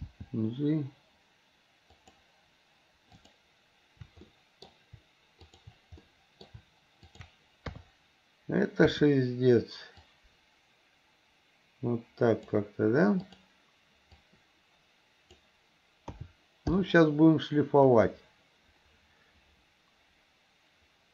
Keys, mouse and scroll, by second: 0.0 g, 4.4 middle click, 5.5 shift+click, 6.1-6.5 middle drag, 7.1 shift+click, 7.7 KP_3, 8.9 KP_1, 10.1-12.6 drag, 14.2 click, 14.4-15.5 drag, 16.2 a, 16.8 i, 18.0-21.1 drag.